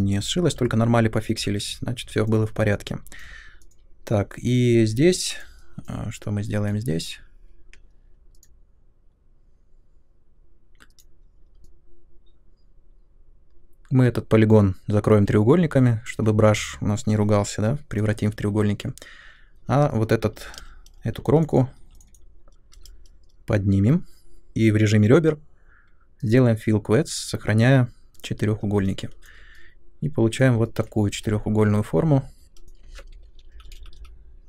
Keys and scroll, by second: 0.0 u, 19.6-22.7 typing, 31.2-32.4 typing, 33.5 shift+Up, 33.6 shift+Up, 33.7 shift+Up, 33.9 shift+Up.